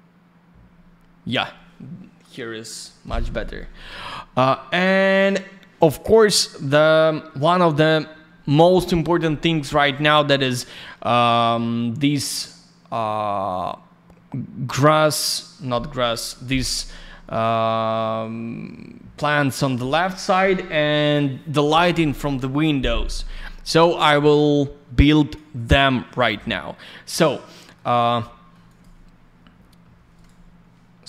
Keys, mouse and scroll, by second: 1.2 click, 9.9 click, 24.0 click, 27.3 alt+middle click, 27.9 scroll down 1, 28.1 alt+middle click, 28.6 click, 28.7 click, 29.4 F4, 30.1 right click, 30.2 right click.